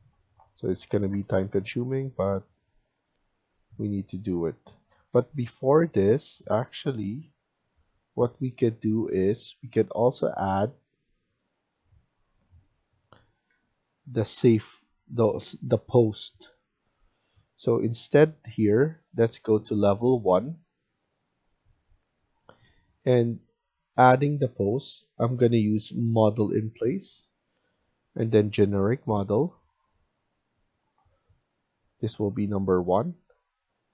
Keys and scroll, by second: 0.6-3.2 typing, 4.8 Escape, 5.0 Escape, 7.2 Escape, 13.5 Escape, 14.3 Delete.